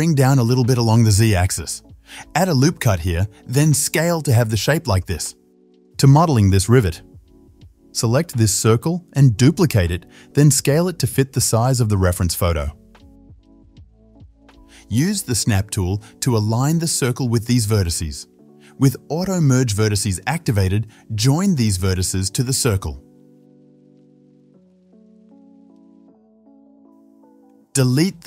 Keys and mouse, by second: 1.6 KP_7, 2.1-5.8 ctrl+shift+middle drag, 2.1 shift+z, 2.7 ctrl+r, 3.7 s, 5.0 g, 5.6 shift+z, 5.8 Tab, 5.8-7.2 shift+drag, 7.2 shift+middle click, 7.4 alt+shift+click, 8.2-13.7 middle drag, 9.5 shift+d, 10.4 s, 13.7 click, 14.3-15.8 ctrl+middle drag, 14.5 ctrl+l, 15.8-18.5 drag, 18.5 middle click, 18.5 1, 19.1 click, 19.3 middle click, 19.7 click, 19.8-21.0 middle drag, 21.0 ctrl+click, 21.5 middle click, 21.6 ctrl+click, 22.2 ctrl+middle click, 23.0 ctrl+click, 23.4 middle click, 23.5 ctrl+click, 24.1 middle click, 24.2 ctrl+click, 24.6 middle click, 24.7 ctrl+shift+click, 25.1 middle click, 25.2 ctrl+click, 25.5 middle click, 25.6-27.4 ctrl+drag, 27.2 3, 27.4-28.2 middle drag.